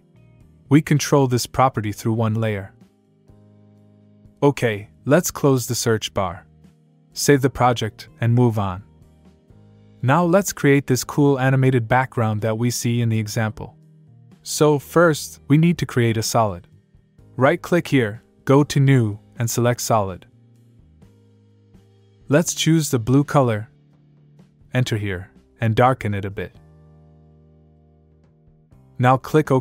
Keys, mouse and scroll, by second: 0.8 click, 6.3 click, 8.6 ctrl+s, 17.8 right click, 20.3 click, 21.7 click, 22.8 click, 24.1 click, 24.9 click, 25.8 click.